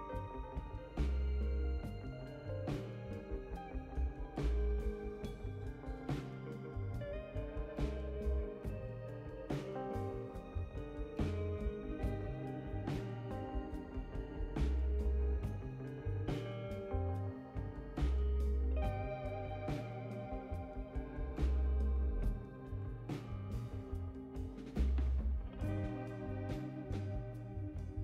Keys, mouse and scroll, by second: 0.0 click, 1.2 m, 7.8 m, 10.1 m, 11.8 m, 13.4 m, 14.6 m, 16.8 click, 17.8 click, 19.4 click, 20.6 click, 21.9 right click, 23.4 right click.